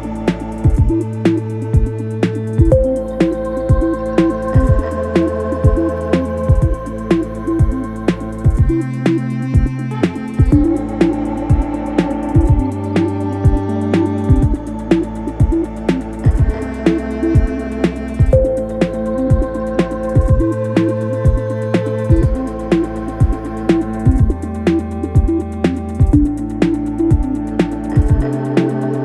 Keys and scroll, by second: 8.3 ], 11.9 ], 13.4 ,, 17.4 [, 18.9 ], 24.7 4, 27.5 F1, 27.7 F2, 28.5 3, 28.9 ].